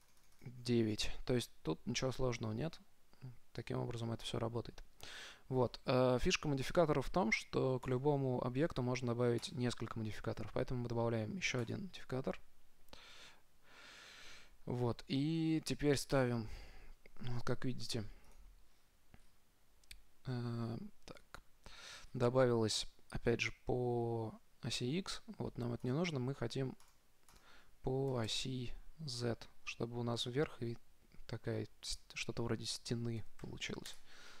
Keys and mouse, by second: 1.8-4.0 middle drag, 4.0-5.5 drag, 5.9-7.8 middle drag, 8.2-11.5 drag, 16.4-18.1 drag, 19.0-21.4 middle drag, 20.8 n, 21.4 t, 21.9-24.3 middle drag, 26.1-29.4 drag, 32.2-34.1 drag.